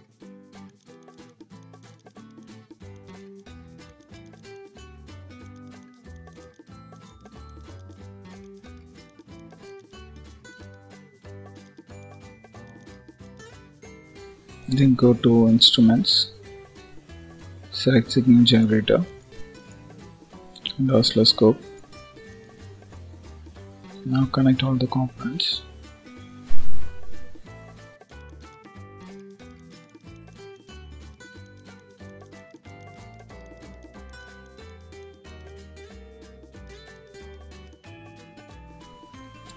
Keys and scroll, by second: 13.6 ctrl+s, 23.9 ctrl+s, 39.1 ctrl+s.